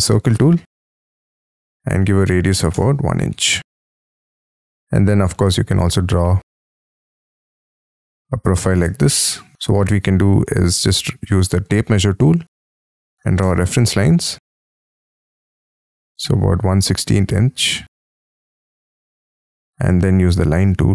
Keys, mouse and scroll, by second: 2.0 1, 2.4 shift+', 2.7 Return, 3.3 space, 4.7-5.3 scroll up 1, 5.3 l, 5.9-6.2 scroll up 5, 6.6-7.6 scroll up 5, 8.5 shift+click, 9.5 space, 10.4 t, 11.3 Escape, 12.3-13.3 typing, 13.4 Return, 14.4 ctrl+z, 17.8 scroll up 1, 18.0 right click, 18.1 click, 19.5 space, 19.6 l.